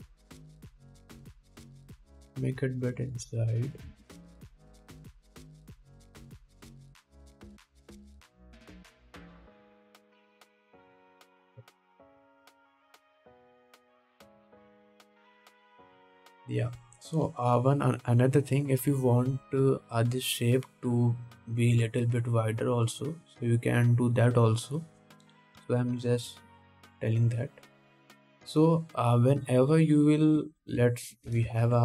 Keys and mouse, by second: 2.3 KP_1, 5.1 ctrl+Tab, 10.3 ctrl+s, 13.8 KP_1, 14.0 KP_7, 26.8 KP_7, 29.2-31.8 drag.